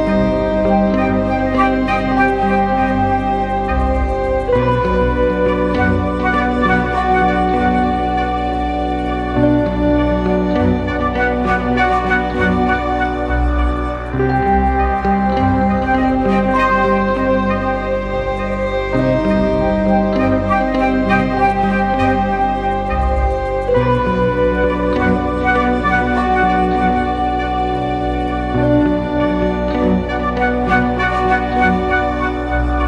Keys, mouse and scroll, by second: 6.4 typing, 15.4 double click, 31.2-32.0 typing.